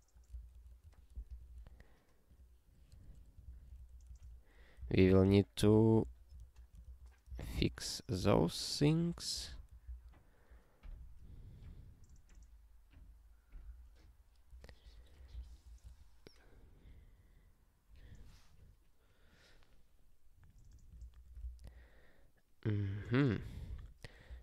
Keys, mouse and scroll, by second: 0.5 ctrl+alt+@, 0.9 Tab, 1.5 ctrl+s, 2.3 click, 2.9 BackSpace, 3.4 ctrl+n, 3.8 alt+f, 4.8 ctrl+d, 5.0 ctrl+n, 5.2 ctrl+b, 5.6 ctrl+d, 6.0 ctrl+n, 6.4 alt+f, 7.3 ctrl+d, 7.6 ctrl+n, 8.2 ctrl+n, 8.8 alt+f, 9.4 alt+b, 13.9 BackSpace, 14.8 BackSpace, 15.4 ctrl+alt+@, 15.8 Tab, 21.0 ctrl+p, 21.4 alt+b, 23.7 ctrl+b, 24.0-24.4 typing.